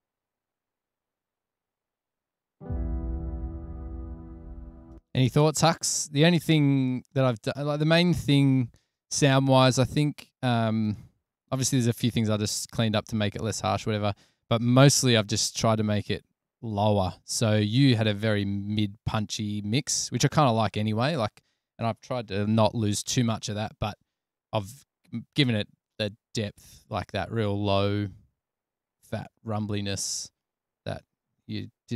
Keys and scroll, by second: 4.8 BackSpace, 7.4 f, 11.7 super+[, 11.8 super+[, 12.2 super+[, 29.6 super+s, 31.4 super+s.